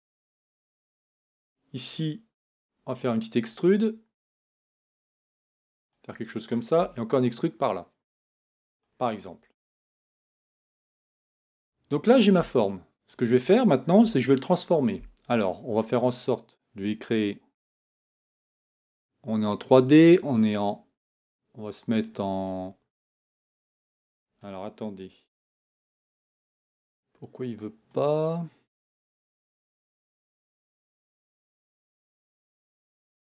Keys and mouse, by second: 2.4 e, 4.9 r, 5.9 r, 6.8 e, 8.4 e, 10.5 Tab, 14.0 Tab, 25.4 Tab, 25.8 Tab, 29.5 Tab, 32.2 Tab.